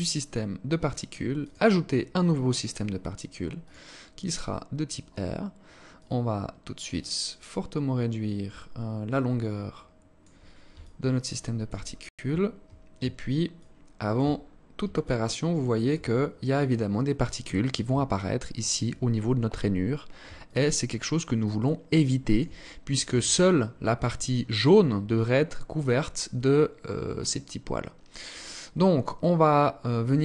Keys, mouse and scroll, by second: 1.2 click, 3.4 click, 5.7 click, 10.5 alt+click, 11.6-12.1 scroll up 8, 13.1 alt+shift+click, 14.1 scroll up 2, 14.6 alt+click, 15.7-16.0 scroll up 2, 17.7 alt+click, 20.0 alt+click, 20.9 alt+click, 23.9-24.6 scroll down 1, 24.6-25.6 scroll down 1, 25.6 scroll up 1, 25.9 scroll down 2, 26.5 scroll down 2, 27.4-28.0 scroll up 4, 28.7-29.2 scroll down 3, 30.1 alt+click.